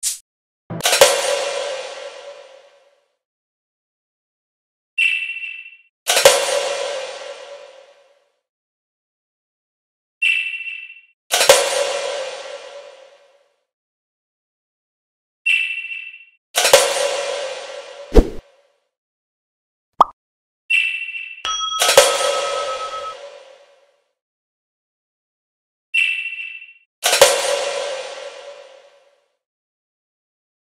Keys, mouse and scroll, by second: 0.8 click, 3.1 click, 5.0 click, 6.7 click, 8.0 click, 9.0 middle click, 9.2 middle click, 10.7 click, 13.3 click, 16.9 click, 17.1 click, 17.2 click, 17.4 click, 17.6 click, 19.4 click, 24.1 click, 26.3 click, 27.0 click, 27.8 click.